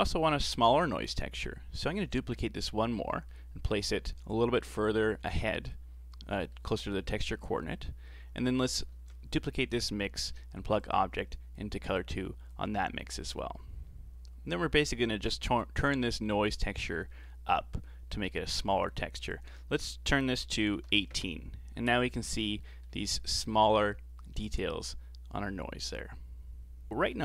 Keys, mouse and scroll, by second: 0.7 scroll down 3, 0.9-1.9 middle drag, 1.9 shift+d, 3.1-6.7 middle drag, 6.7-7.1 scroll up 4, 7.1-8.5 middle drag, 8.5 click, 8.9 shift+d, 10.8 click, 18.1-22.2 drag, 22.2-22.6 scroll up 2, 22.6-26.3 shift+middle drag.